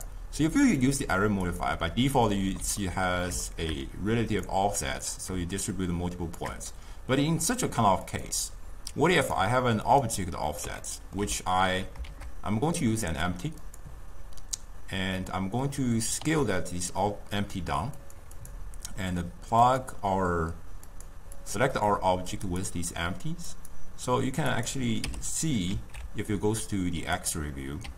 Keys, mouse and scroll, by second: 0.0 click, 0.8 click, 2.4-4.6 middle drag, 4.6-7.6 drag, 8.2-9.4 drag, 10.0 click, 10.9-12.1 ctrl+middle drag, 12.1 shift+a, 16.3 s, 18.5 click, 19.7 click, 21.0 click, 21.5 click, 23.6 click, 24.6 click, 25.1 m, 25.8 alt+z, 27.3 click.